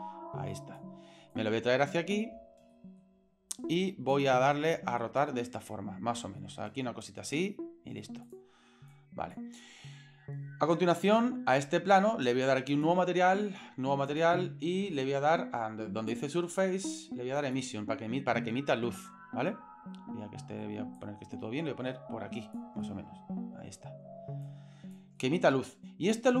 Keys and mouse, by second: 1.3 click, 2.7-3.0 shift+middle drag, 4.2 click, 5.2-7.1 drag, 8.2 click, 8.9 click, 12.7 click, 14.1 click, 16.1-17.6 drag, 19.6-20.6 middle drag, 21.0-22.6 drag, 22.8 middle click, 24.5 click, 25.2-25.9 middle drag.